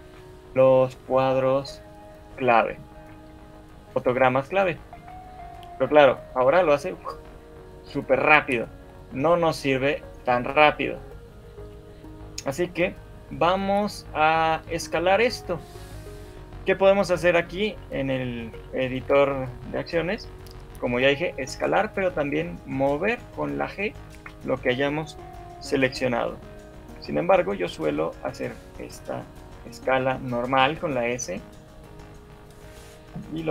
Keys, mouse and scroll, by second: 0.3 scroll up 2, 0.7 shift+middle click, 2.4 shift+middle click, 3.5 shift+Left, 5.1 alt+a, 5.7 Escape, 6.3 right click, 17.5 shift+middle click, 17.5 click, 18.3 click, 19.1 shift+click, 21.3 g, 23.3 g, 26.9 shift+click, 27.9 s.